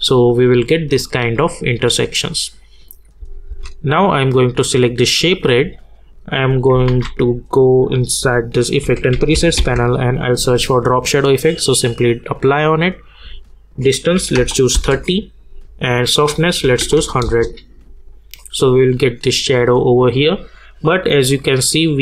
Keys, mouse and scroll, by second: 2.6 click, 3.2 space, 4.7 click, 6.8 ctrl+a, 8.6-10.0 typing, 11.3 click, 14.8 Return, 16.3 click, 17.2 Return, 20.1 click.